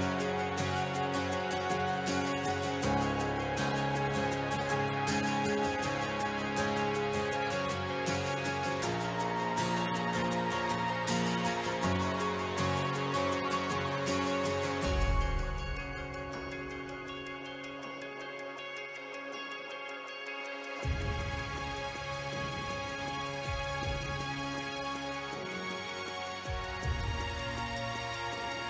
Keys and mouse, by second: 3.1 click, 3.8 g, 4.4 click, 4.9 g, 5.2 z, 5.9 click, 6.7 click, 8.7 click, 10.8 click, 11.6 ctrl+middle click, 12.9 ctrl+middle click, 15.3 ctrl+b, 18.8 g, 20.2 click, 21.0 g, 21.4 z, 22.7 click, 27.3 Escape, 27.6 r, 27.6 y.